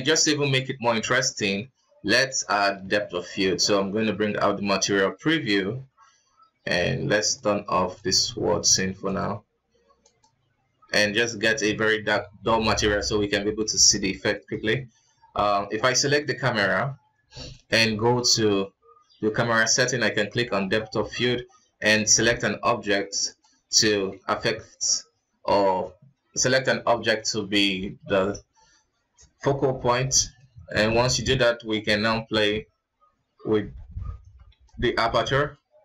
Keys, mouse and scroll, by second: 2.4-3.9 right drag, 3.9 z, 8.1-10.7 drag, 11.1 scroll up 2, 11.6-12.4 scroll down 1, 12.4 alt+a, 13.0 scroll up 3, 13.6-14.5 scroll down 3, 14.5 right click, 16.2 right click, 20.0 click, 22.2 click, 24.1-24.5 scroll up 4, 24.8-25.9 scroll down 3, 30.3-32.3 shift+middle drag, 32.3-35.8 drag.